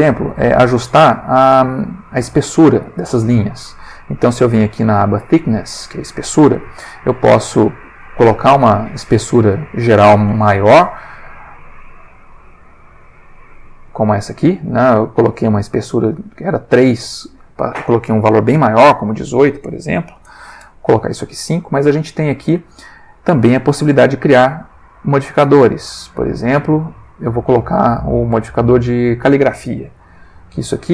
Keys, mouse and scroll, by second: 0.3 middle click, 7.2 click, 8.5 click, 10.7 F12, 13.9 click, 14.7 middle click, 18.9 click, 20.0 5, 20.2 Return, 21.3 middle click, 23.3 click, 27.7 click, 28.6 middle click, 30.1 F12.